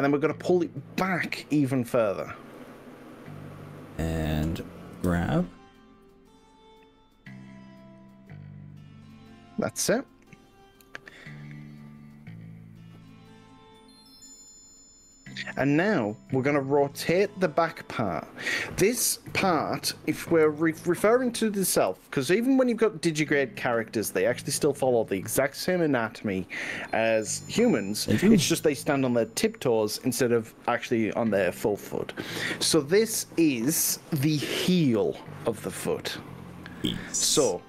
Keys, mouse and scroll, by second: 2.7 click, 5.0 g, 14.3 click, 16.0-18.4 middle drag, 19.3 KP_1, 20.1 KP_2, 20.4 KP_3, 21.9 r, 37.5 click.